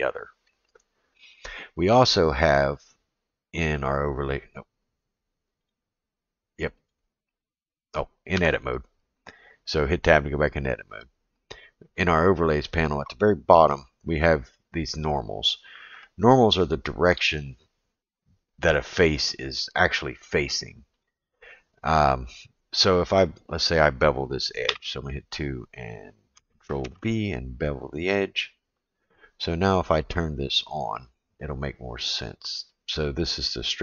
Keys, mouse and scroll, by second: 3.8-4.8 drag, 5.6-6.9 drag, 7.3-8.0 drag, 8.3 Tab, 12.1-18.4 drag, 21.0-22.5 drag, 23.2 click, 24.7 2, 25.2 click, 26.8 ctrl+b, 30.1-33.8 drag.